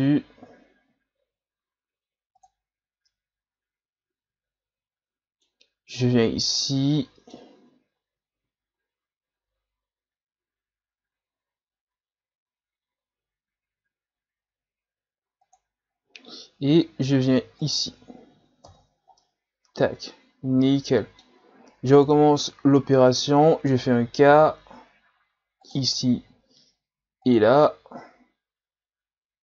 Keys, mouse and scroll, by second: 19.2-22.1 middle drag, 22.1 KP_3, 22.7-24.1 scroll up 4, 24.3 k.